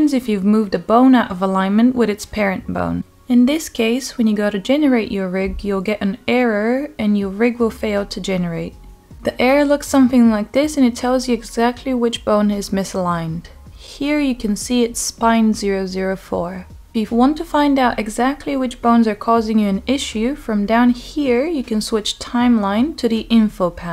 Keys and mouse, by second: 0.4-0.8 middle drag, 1.1 click, 2.0 click, 2.8 g, 6.0 middle click, 6.3 Tab, 8.4 click, 11.2 click, 18.7 click, 20.9 click, 22.5-23.1 drag.